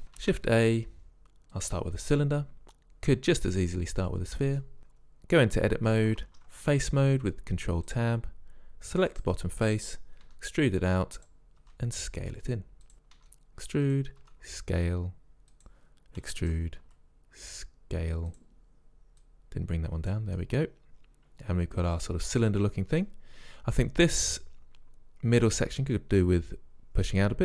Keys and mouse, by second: 0.2 shift+a, 4.8 Tab, 6.2 ctrl+Tab, 9.1-11.0 drag, 10.3 e, 11.6 s, 13.2 e, 14.2 s, 16.3 e, 16.9 s, 19.3 click, 20.2 click, 20.4 middle click.